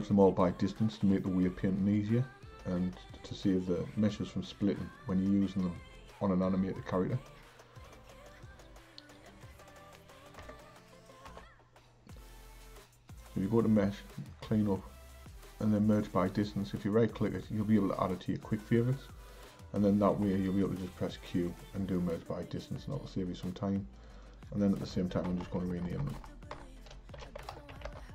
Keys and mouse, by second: 8.3-10.4 drag, 10.4 Tab, 11.3 a, 13.1-16.3 drag, 20.2 q, 24.0 click, 24.2-25.4 drag, 25.4 BackSpace, 25.6 BackSpace, 25.9 BackSpace, 26.0 BackSpace.